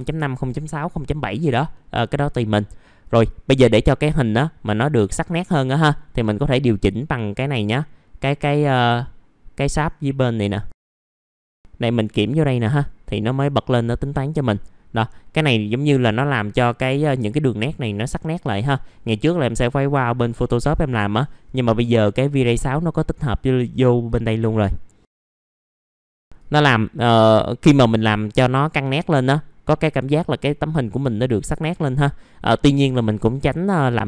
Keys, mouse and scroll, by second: 4.0 middle click, 4.2 scroll down 1, 5.3 click, 5.8 scroll up 1, 10.7 click, 16.0 middle click, 16.2 scroll down 1, 17.3-17.8 scroll up 1, 23.4 click, 25.4 click, 25.5 middle click, 25.6 scroll down 1, 25.7 scroll up 1, 28.7 click, 32.8-34.0 drag.